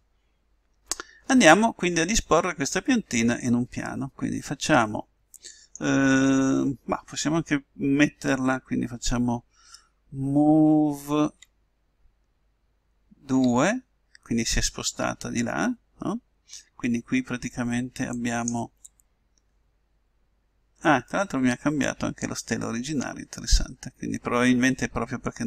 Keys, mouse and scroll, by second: 1.7-4.3 middle drag, 11.2 m, 18.2-20.0 drag, 19.7 middle click, 21.1-25.4 middle drag.